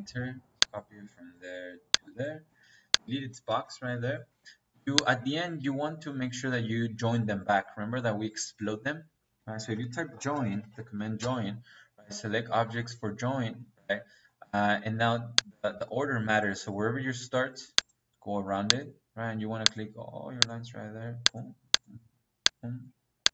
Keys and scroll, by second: 2.4 Escape, 3.4 Delete, 4.2 Escape, 5.4 Escape, 9.3 Escape, 10.1-11.1 typing.